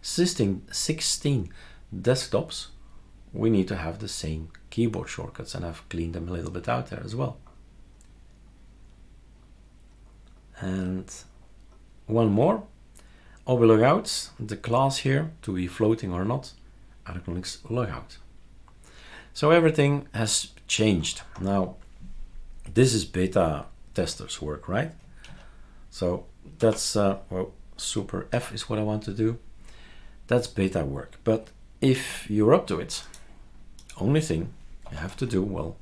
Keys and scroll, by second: 25.2 super+x, 26.6 Escape, 28.3 super+f, 31.9 super+q, 34.8 F2, 35.1 Right.